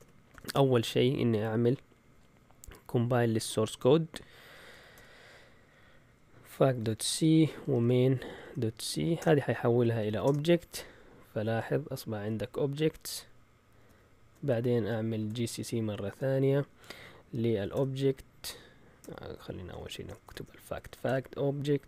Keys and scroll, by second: 0.0-0.4 typing, 3.6-5.2 typing, 6.5-10.5 typing, 15.2-21.8 typing.